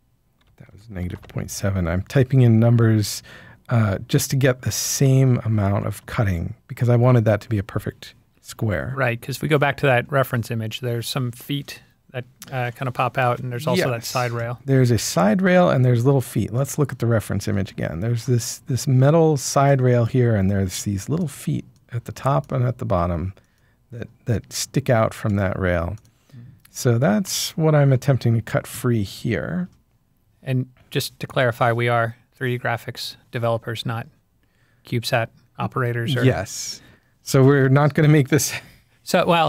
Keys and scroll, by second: 0.9 typing, 1.1 Return, 5.6 typing.